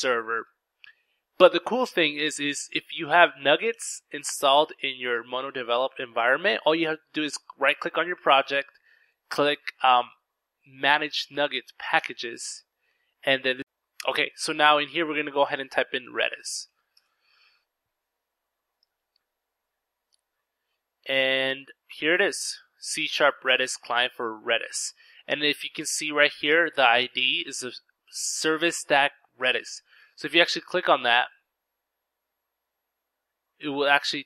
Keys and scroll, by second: 16.6-17.6 typing, 19.4 typing.